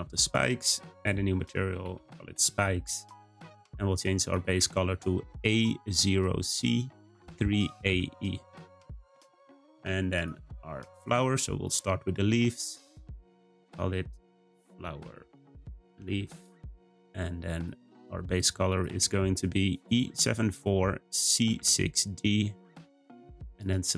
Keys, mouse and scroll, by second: 0.2-3.4 drag, 11.6 click, 12.8-16.2 drag, 17.5 click, 23.5 click.